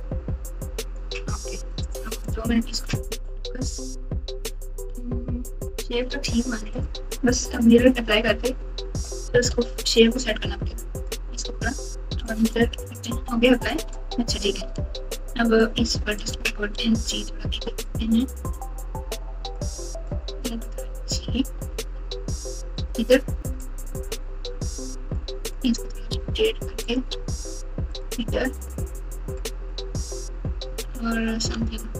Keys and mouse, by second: 1.8 click, 2.2 click, 3.2 KP_Divide, 3.5 KP_Add, 3.9 KP_Add, 3.9 KP_Add, 4.0 KP_Add, 4.8 KP_Add, 5.1 KP_Add, 5.2 KP_Add, 5.2 KP_Add, 9.4 KP_Divide, 12.3 click, 13.7 Tab, 14.7 alt+z, 15.7 click, 16.8 g, 19.5 click, 19.7-21.7 drag, 21.7 g, 23.6 click, 23.7 click, 25.2 click, 26.0 r, 27.1 g, 30.8 alt+z, 31.5 alt+z.